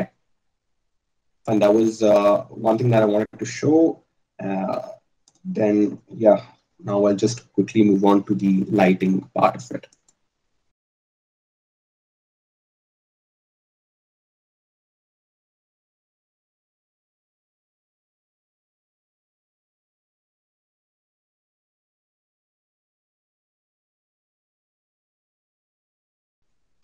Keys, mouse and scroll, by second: 12.5 KP_0, 16.7 a.